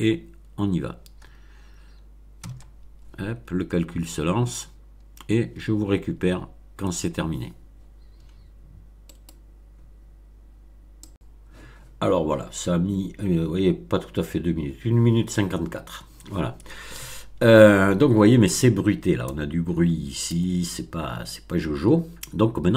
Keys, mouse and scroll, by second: 2.4 F12, 3.4-3.9 scroll down 2, 9.1 right click, 11.0 click.